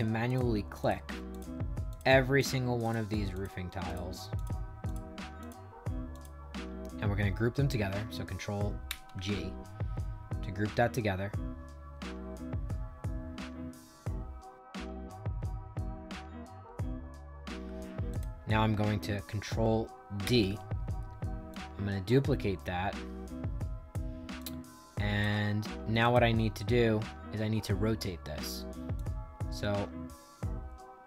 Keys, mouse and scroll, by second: 0.2 shift+click, 0.7 shift+click, 1.2 shift+click, 1.8 shift+click, 2.3 shift+click, 2.7 shift+click, 3.3 shift+click, 3.8 shift+click, 4.3 shift+click, 4.8 shift+click, 5.3 shift+click, 6.0 shift+click, 8.8 ctrl+g, 12.6 middle click, 15.1 click, 17.2 ctrl+z, 18.0 click, 20.1 ctrl+d, 21.4-23.8 drag, 24.3 click, 25.3 ctrl+z, 25.9 click, 28.9-31.0 shift+drag.